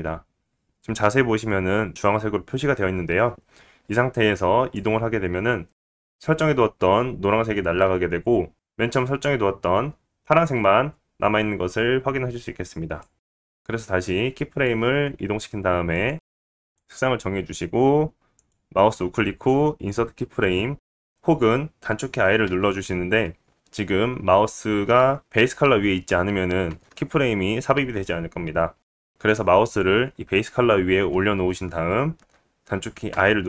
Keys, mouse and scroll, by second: 7.0-19.5 drag, 15.5-16.7 middle drag, 21.1 ctrl+z, 28.3 i, 28.7 i.